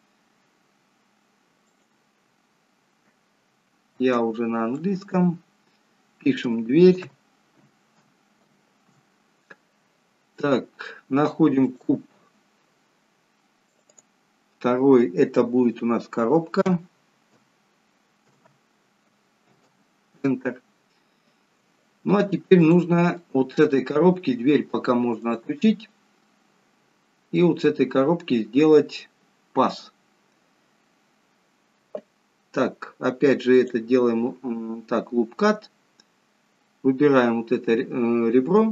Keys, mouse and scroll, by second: 1.7 click, 5.1 click, 11.9 click, 13.7 click, 22.6 click, 23.2 middle click, 25.4 click, 26.3 middle click, 27.9-28.3 scroll up 2, 29.8-30.5 scroll down 3, 33.6 click, 38.5 click.